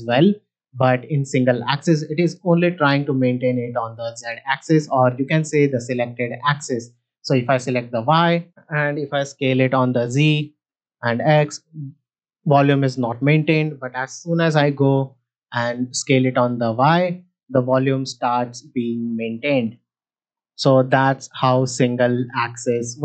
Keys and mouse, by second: 0.6-1.4 drag, 7.2 click, 9.5 s, 9.7 z, 10.8 s, 10.9 x, 11.6 s, 11.8 x, 13.0-14.4 right drag, 14.4 s, 14.5 y, 18.5-19.7 drag, 21.8 click, 22.3-22.9 drag.